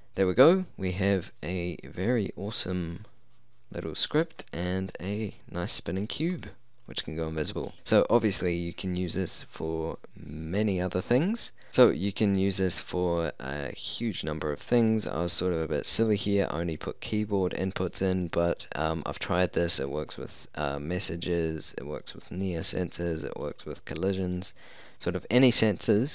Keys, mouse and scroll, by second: 1.5-4.1 drag, 6.4-7.8 drag, 12.3-14.1 drag, 14.9-16.9 drag, 17.2-21.8 drag, 23.6-26.1 drag.